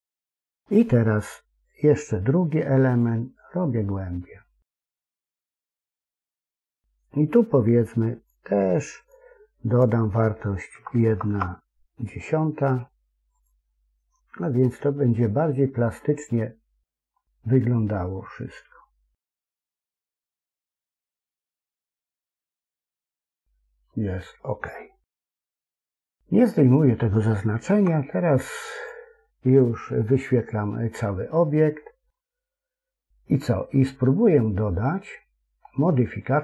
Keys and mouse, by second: 2.9-8.2 drag, 9.0-13.4 drag, 10.8 BackSpace, 11.2 BackSpace, 14.5-17.0 middle drag, 17.7-20.1 middle drag, 21.6 KP_1, 27.6 Tab, 29.9-30.9 middle drag, 31.4-32.0 middle drag.